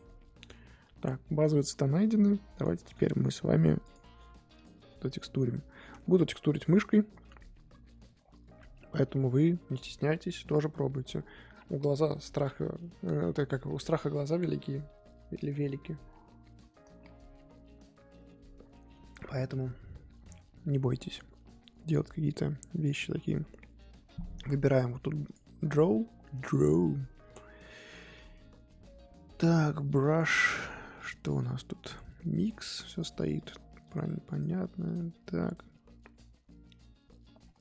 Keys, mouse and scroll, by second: 0.4 click, 0.6 scroll down 1, 0.8-1.3 middle drag, 1.3-1.9 scroll up 2, 1.9-2.6 scroll up 3, 2.6 click, 4.6-21.9 drag, 21.9 middle click, 22.4-23.0 scroll up 3, 23.0-23.4 scroll down 2, 23.4-25.3 middle drag, 25.3-29.5 drag, 29.5-33.8 middle drag, 33.8-37.6 drag.